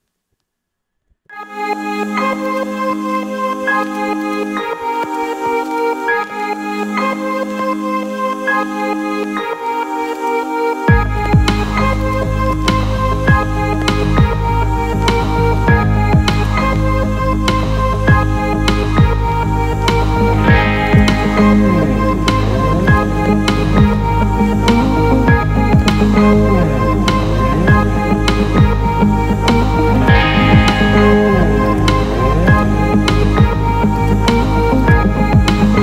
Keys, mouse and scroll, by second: 1.3 KP_0, 2.4-3.6 middle drag, 3.8 alt+shift+middle click, 4.2 alt+middle click, 5.0 ctrl+alt+middle click, 5.7-8.6 middle drag, 8.9 KP_0, 9.5 z, 10.1-11.4 alt+middle drag, 12.4-13.2 alt+middle drag, 14.7 g, 14.9 z, 17.2 KP_0, 18.6 g, 19.0 shift+z, 20.8 click, 22.0 KP_0, 22.8-23.6 alt+middle drag, 23.9 g, 24.2 shift+z, 25.8 click, 26.1 KP_0, 29.9 click, 31.6 click, 32.4 drag.